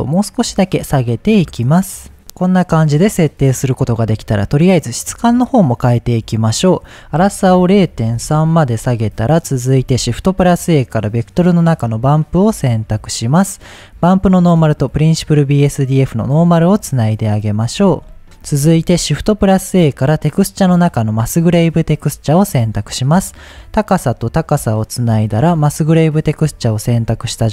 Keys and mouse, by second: 6.8-8.7 drag, 9.8 shift+a, 14.2-15.2 drag, 16.3 click, 17.3-17.7 shift+drag, 19.0 shift+a, 23.1-24.1 drag, 24.7 click, 27.3 ctrl+t.